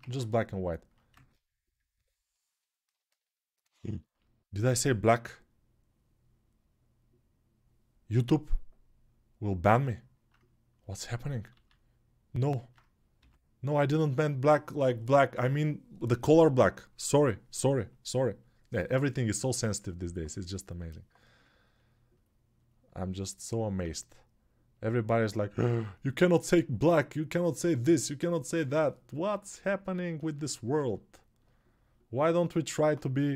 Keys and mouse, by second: 1.1 ctrl+Tab, 11.3 alt+q, 11.3-29.8 right drag, 12.9 g, 29.8-33.3 alt+shift+drag.